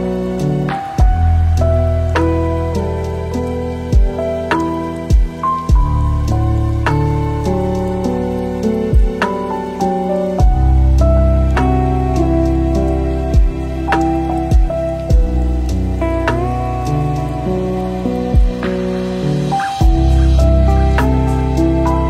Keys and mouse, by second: 4.7 ctrl+t, 5.5 click, 6.5 middle click, 7.0 click, 7.6 middle click, 8.6-9.7 drag, 9.8 click, 10.5 shift+click, 12.2 middle click, 13.0 space, 16.0-17.2 drag, 18.1-19.2 drag, 19.3 middle click, 19.9 click, 20.9 click.